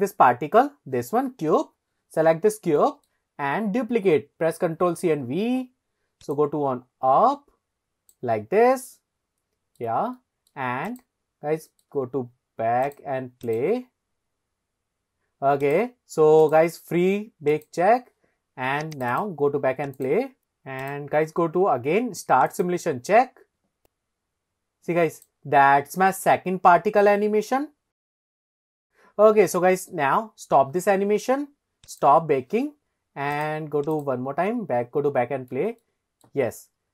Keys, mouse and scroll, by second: 1.5-2.1 scroll up 2, 2.8 shift+middle click, 3.3-4.0 scroll down 2, 4.8 ctrl+c, 5.2 ctrl+v, 6.4 click, 9.0-10.0 middle drag, 10.2 shift+middle click, 10.9 drag, 11.3-11.6 scroll up 2, 11.7 shift+middle click, 12.9 click, 13.5 click, 15.7 click, 16.4 click, 17.5 click, 18.9 click, 19.2 click, 20.0 click, 20.2 ctrl+z, 20.8 click, 22.5 click, 23.8 click, 27.5 scroll up 1, 27.6 shift+middle drag, 27.8 shift+middle click, 28.1-28.6 scroll up 5, 28.5-29.1 shift+middle drag, 30.7 middle click, 32.0 click, 33.4 click, 33.9 click, 35.9-36.3 shift+middle drag.